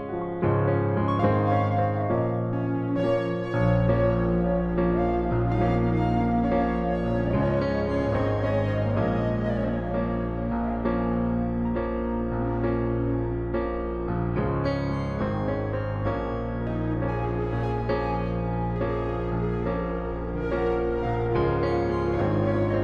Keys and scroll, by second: 10.3 F3.